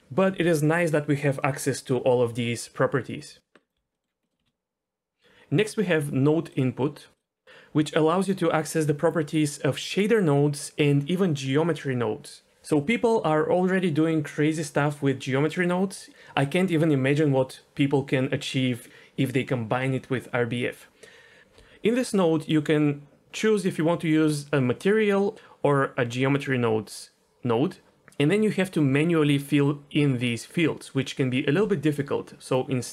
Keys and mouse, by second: 3.6 click, 3.7 Delete, 3.9 middle click, 4.3 middle click, 4.4 shift+a, 22.5-27.9 drag.